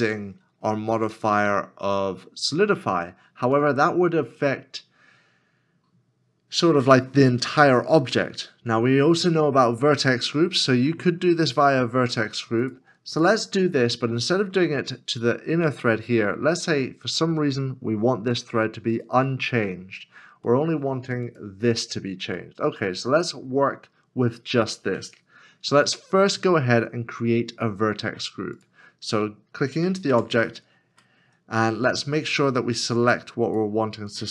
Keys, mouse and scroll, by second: 13.2 shift+middle click, 20.5 middle click, 30.1 middle click, 31.0 Tab, 31.0 middle click.